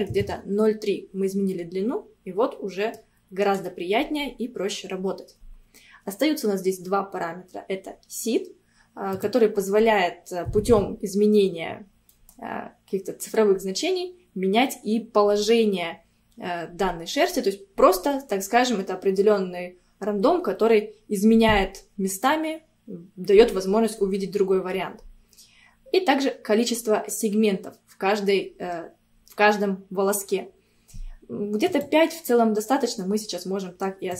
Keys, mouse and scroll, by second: 1.6-3.4 middle drag, 3.4 scroll up 1, 9.2-12.1 drag, 12.1-14.0 middle drag, 14.0-17.1 scroll up 1, 31.7-34.1 drag.